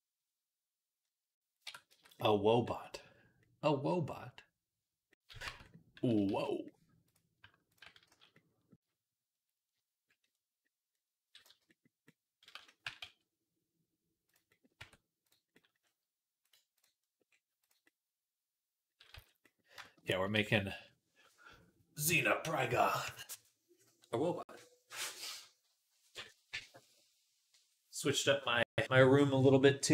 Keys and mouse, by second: 1.5 Tab, 1.7 z, 5.3 Tab, 6.1-7.5 middle drag, 6.1 z, 7.5 ctrl+click, 7.6-11.3 ctrl+middle drag, 7.9 z, 11.3-15.7 drag, 11.3 z, 12.4 z, 12.7 g, 14.6 Tab, 15.7 middle click, 16.3-19.3 right drag, 17.5 click, 17.5 middle click, 19.0 z, 20.3 ctrl+s, 23.2-29.9 right drag.